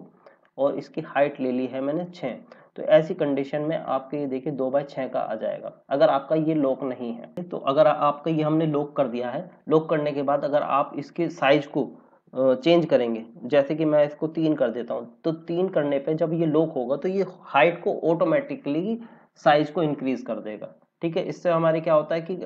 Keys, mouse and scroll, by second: 0.4 click, 2.2 KP_6, 2.8 click, 7.3 click, 10.5 click, 14.6 KP_3, 15.5 click.